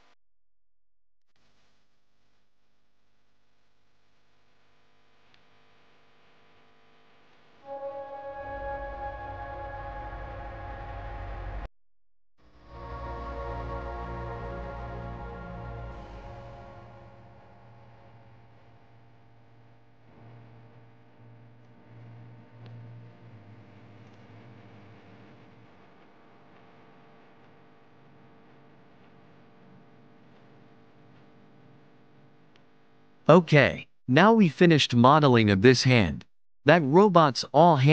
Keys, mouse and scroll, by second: 0.6 e, 4.2-5.9 middle drag, 7.7 Tab, 7.9 click, 8.8 s, 10.0-11.8 middle drag, 13.2 click, 13.9 click, 14.3 Tab, 16.2 middle click, 16.8-17.5 scroll up 6, 17.5 middle click, 18.4 Tab, 18.9 Tab, 19.5 s, 22.1-23.7 middle drag, 24.5-25.7 scroll down 24, 25.7 middle click, 26.5 shift+middle click, 26.9-27.6 scroll down 1, 27.6-29.1 middle drag, 29.1 KP_1, 36.2 Tab, 37.0 click, 37.7 shift+drag.